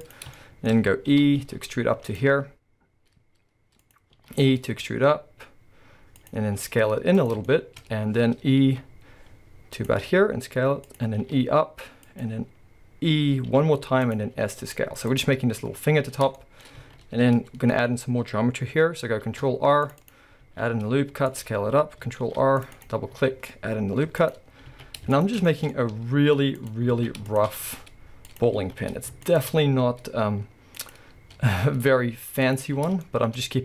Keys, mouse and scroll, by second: 0.2 click, 0.4-2.2 shift+middle drag, 1.1 e, 2.2 click, 2.3 s, 3.9 click, 4.2 e, 6.3 click, 6.5 s, 7.3 click, 7.9-8.5 scroll up 2, 8.5 scroll up 1, 8.7 e, 9.9 click, 10.0 s, 11.0 click, 11.2 e, 12.2 click, 13.5 e, 14.2 click, 14.4 s, 15.2 click, 16.1-16.4 scroll, 16.4-20.1 shift+middle drag, 16.8 alt+a, 17.5-19.2 scroll up 2, 19.2 scroll up 1, 19.2 ctrl+r, 20.1 click, 20.4 s, 21.4 click, 22.9 click, 23.2 s, 24.3 click, 24.4 scroll, 24.7 alt+a, 25.1 alt+shift+click, 25.4-26.6 shift+middle drag, 25.7 scroll up 2, 25.9 s, 26.9 alt+a, 27.3 alt+shift+click, 27.6 s, 28.4 click, 28.6 alt+a, 29.3 alt+shift+click, 29.7 s, 30.9 click, 32.5 click, 33.0-33.6 shift+middle drag.